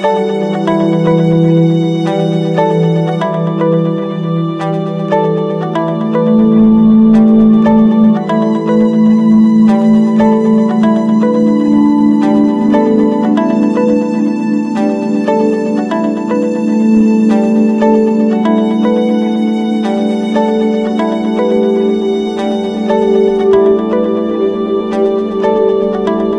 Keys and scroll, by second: 9.7 Return, 16.1 ctrl+-, 17.0 ctrl+=, 17.7 ctrl+z, 18.5 ctrl+=.